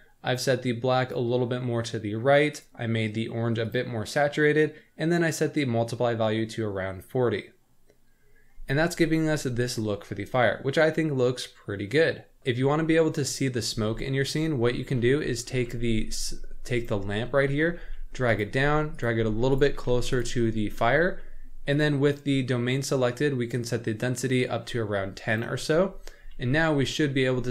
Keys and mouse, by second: 0.5 click, 2.5 click, 13.7 z, 14.8 shift+middle drag, 15.2 middle click, 15.7 z, 16.7 click, 17.8 g, 18.6 g, 19.2 g, 19.8 g, 23.5-25.3 drag, 26.1 z, 27.1 middle drag.